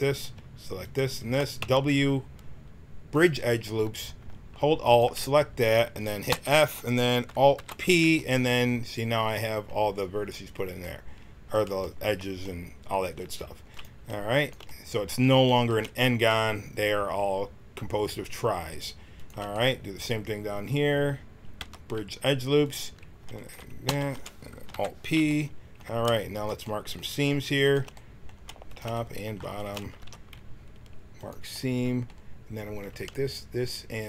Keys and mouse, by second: 1.5 w, 4.8-6.2 drag, 6.2 f, 7.5 alt+p, 13.6-21.5 drag, 21.5 w, 23.8 f, 24.7 alt+p, 26.3-29.2 drag, 29.9 ctrl+e, 32.7-34.0 drag.